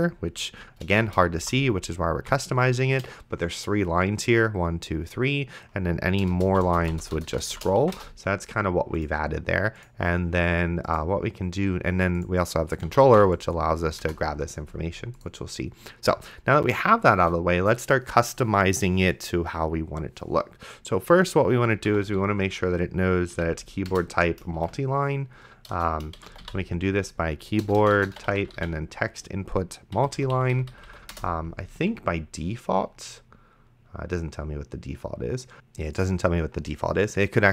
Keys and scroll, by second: 1.3 shift+Return, 1.7 d, 6.6 shift+Return, 6.7 d, 8.0 BackSpace, 12.8-14.1 typing, 17.2 Return, 21.6-22.6 typing, 23.4 Down, 23.9 Return, 24.9-29.1 typing, 30.0 Down, 31.1 Return.